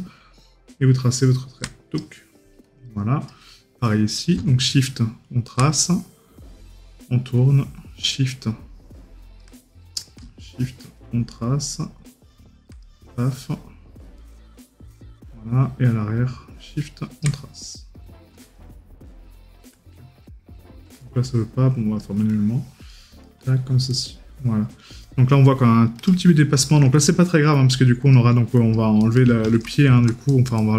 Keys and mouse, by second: 14.2 right click, 23.3 right click, 30.6 right click.